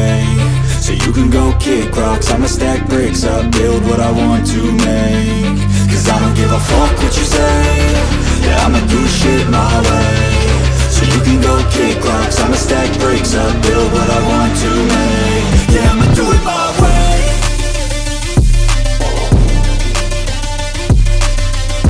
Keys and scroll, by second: 8.4 v, 17.6 ctrl+x, 18.9 Up.